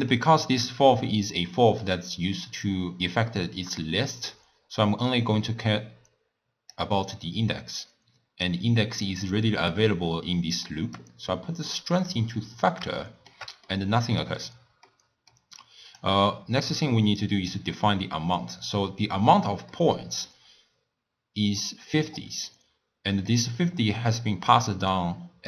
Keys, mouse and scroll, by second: 0.7 drag, 4.3 click, 7.8 click, 11.0-13.0 drag, 13.0-15.6 shift+middle drag, 15.6 click, 16.8-17.2 scroll up 1, 17.2 click, 19.7-25.4 middle drag.